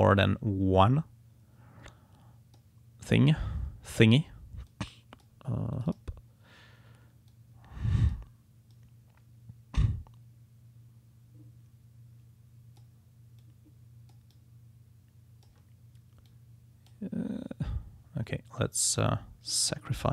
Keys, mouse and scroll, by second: 0.0-2.8 drag, 4.7 click, 5.7 click, 7.3-8.3 drag, 8.7 click.